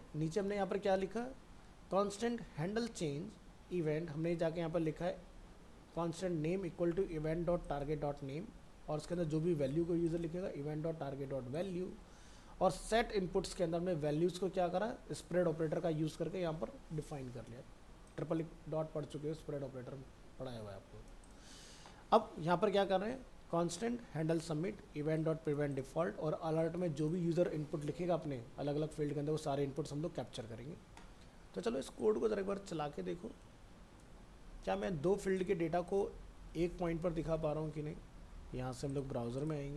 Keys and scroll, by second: 34.6 ctrl+c, 36.5 ctrl+a, 36.9 ctrl+v.